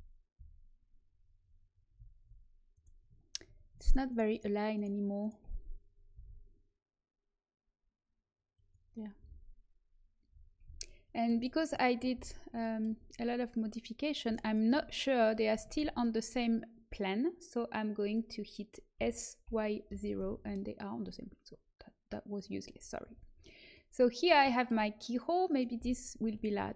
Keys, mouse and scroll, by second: 0.3 z, 3.6 right click, 6.1 r, 9.1 a, 10.6 z, 12.1 z, 14.3 right click, 15.2-17.4 drag, 18.9 s, 22.2-23.3 drag, 23.0 a, 23.3 middle click, 23.9 middle click, 25.4 middle click, 26.3-26.7 right drag.